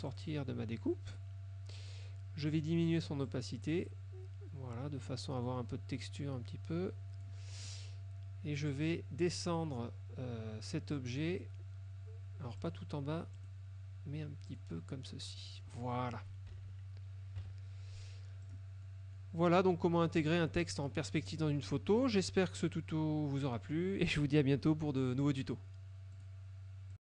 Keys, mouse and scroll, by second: 1.2 click, 3.3-7.9 drag, 8.8 click, 12.7 click, 13.5 click, 14.6 click, 15.5 click, 16.7 KP_Subtract, 17.5 KP_Subtract, 18.6 click, 19.0 middle click, 19.7 middle click, 20.3 middle click, 21.3 middle click, 22.1 click, 26.3 click.